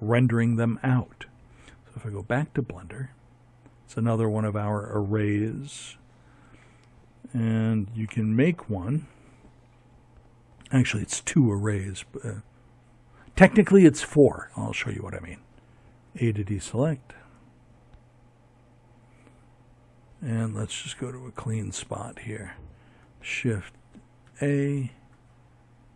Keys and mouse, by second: 3.4 Tab, 13.9 a, 19.3-22.1 drag, 22.1 shift+a.